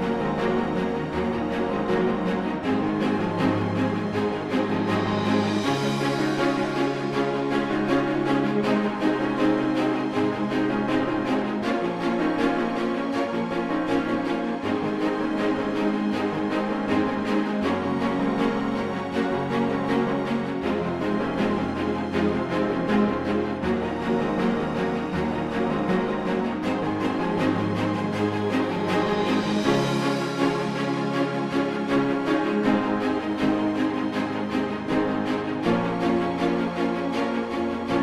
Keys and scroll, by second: 29.5 space, 37.0 ctrl+z.